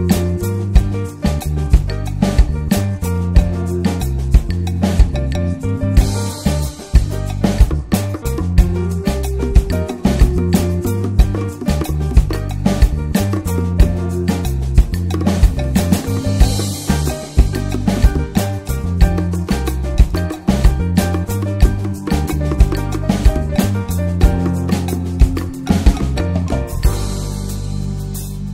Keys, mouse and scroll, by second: 0.4-3.8 middle drag, 5.0-5.9 middle drag, 5.9 drag, 6.8-10.2 middle drag, 10.2-12.1 drag, 12.1-13.2 middle drag, 13.2-21.4 drag, 23.4-26.4 middle drag, 26.4-28.5 drag.